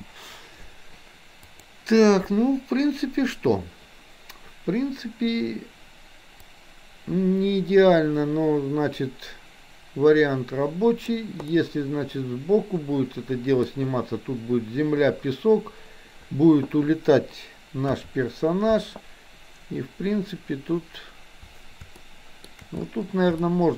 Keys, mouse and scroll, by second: 1.4 click, 6.5-11.2 drag, 11.4-13.7 middle drag, 17.9 KP_3, 22.0-22.4 shift+middle drag, 23.5 shift+middle drag.